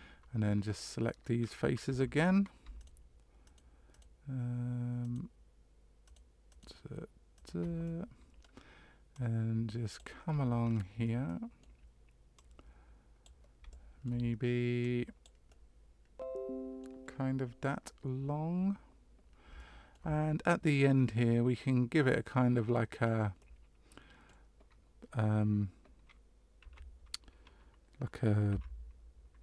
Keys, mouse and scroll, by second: 1.9 3, 2.1 right click, 2.8 shift+right click, 3.4 shift+right click, 3.9 shift+right click, 5.0 right click, 6.0 shift+right click, 6.5 shift+right click, 7.3 shift+right click, 7.8 middle click, 9.1 click, 10.6 scroll down 3, 11.2 middle click, 12.3 click, 13.7 shift+middle click, 14.8 click, 15.5 middle click, 19.5 shift+middle click, 22.6-23.4 scroll up 2, 23.4 middle click, 26.6 e.